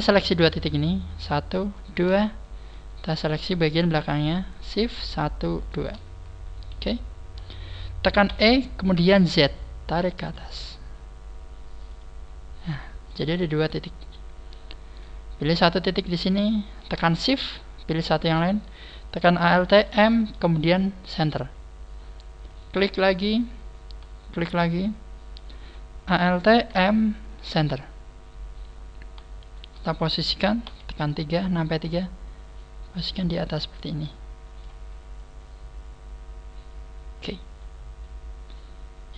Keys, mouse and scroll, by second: 1.1 right click, 1.8 shift+right click, 2.2 scroll down 4, 2.7 middle click, 3.8 scroll up 2, 4.9 shift+right click, 5.6 shift+right click, 6.8 KP_1, 7.3 scroll down 4, 8.3 e, 12.4 click, 12.4-13.0 scroll down 2, 13.0 middle click, 13.0 scroll down 1, 15.3-16.0 scroll up 1, 16.0 right click, 17.7 shift+right click, 21.2 alt+m, 22.4 right click, 22.8 middle click, 24.2 shift+right click, 24.2 middle click, 24.8 middle click, 26.6 alt+m, 27.5 alt+m, 29.4 shift+right click, 30.6 KP_3, 31.2 scroll down 4, 31.8 scroll up 4, 32.5 click, 32.5 scroll down 1, 35.1 click, 38.4 scroll up 4.